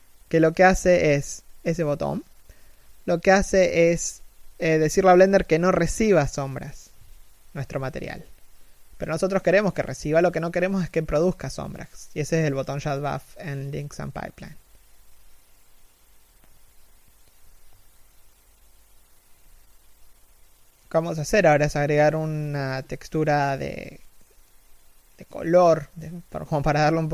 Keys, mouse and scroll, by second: 5.8 scroll down 1, 6.0 x, 6.5 right click, 6.6 x, 6.7 z, 6.8 scroll up 1, 7.1 right click.